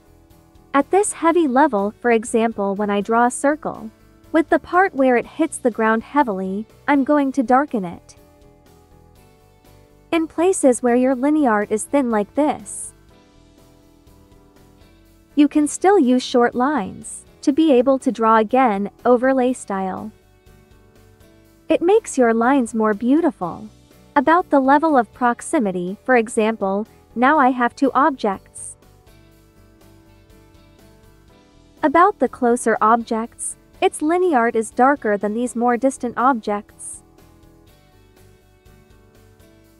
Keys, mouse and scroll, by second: 2.7 click, 9.3 ctrl+z, 12.6 ctrl+z, 12.7 click, 13.2 ctrl+z, 13.4-16.2 ctrl+drag, 16.4 ctrl+click, 17.0 ctrl+z, 17.1 ctrl+click, 17.5 ctrl+z, 17.6 ctrl+click, 17.9 ctrl+z, 18.0 ctrl+click, 19.2 ctrl+z, 19.2 ctrl+click, 19.7 ctrl+z, 19.8 ctrl+click, 21.8 ctrl+z, 21.9 ctrl+click, 22.6 ctrl+z, 22.8 ctrl+click, 23.1 ctrl+z, 23.2 ctrl+click, 26.2 click, 30.0 click, 32.8 ctrl+z, 32.9 ctrl+click, 36.9 ctrl+z, 37.0 ctrl+click.